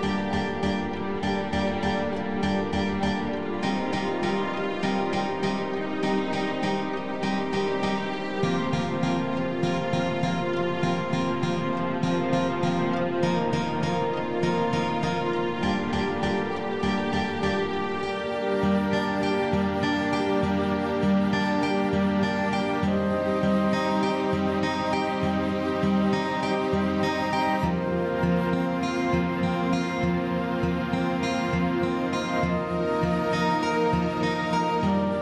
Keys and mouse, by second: 1.6-4.0 drag, 4.9 click, 7.0 x, 8.2 click, 12.5 click, 14.5 click, 15.5 click, 16.3 click, 17.7 click, 19.1 click, 19.7 click, 20.3 click, 20.6 click, 23.7 click, 24.2 x, 24.7 click, 26.8 click, 27.6 click, 29.1 click, 29.9-34.1 drag, 34.5 click.